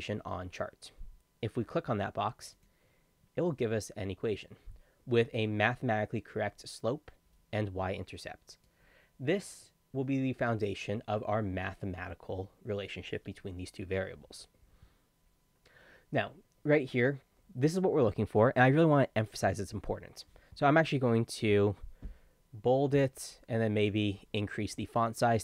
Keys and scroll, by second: 21.5 ctrl+b.